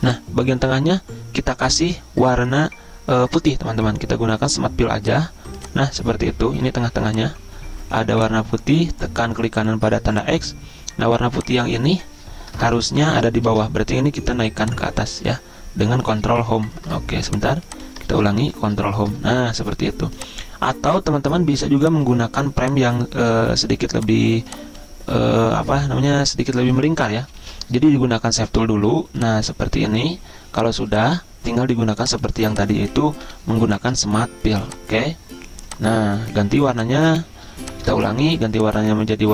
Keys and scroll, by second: 13.5 ctrl+z, 16.4 ctrl+Home, 18.1 ctrl+z, 18.7 ctrl+Home, 23.9 z, 27.4 ctrl+z, 33.3 Delete, 37.9 ctrl+z.